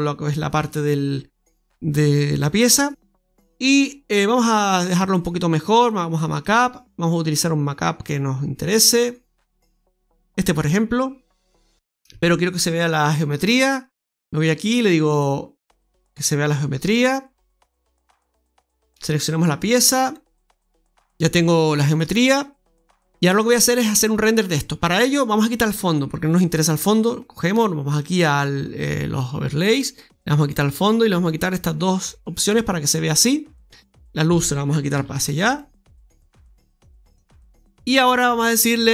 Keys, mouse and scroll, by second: 4.9 click, 13.3 click, 18.4 Tab, 18.9 right click, 19.9 click, 20.9 Tab, 20.9-22.1 scroll down 2, 27.9 click, 33.7 right click, 34.8 g, 36.5 click.